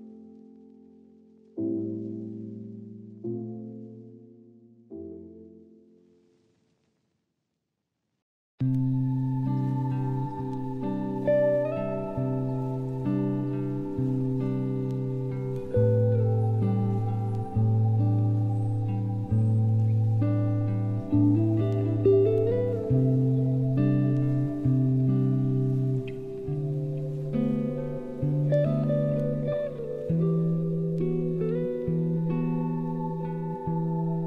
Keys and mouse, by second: 1.3-2.1 middle drag, 2.6 click, 3.6 click, 6.3-6.7 middle drag, 6.9 shift+middle click, 7.4-8.0 middle drag, 9.5 ctrl+a, 9.9 Tab, 10.1 a, 10.3 q, 11.8 q, 13.0 Tab, 13.7 click, 14.7-15.0 drag, 15.4 Tab, 15.6 a, 15.8 q, 16.8 Tab, 18.6 click, 19.3-21.7 drag, 22.0 middle click, 23.3 shift+middle drag, 24.4 middle click, 24.8 middle click, 25.5 middle click, 26.4-28.7 drag, 29.2-30.6 drag, 31.0 a, 31.1 a, 31.7 middle drag, 32.2 shift+middle drag, 33.1-34.2 middle drag.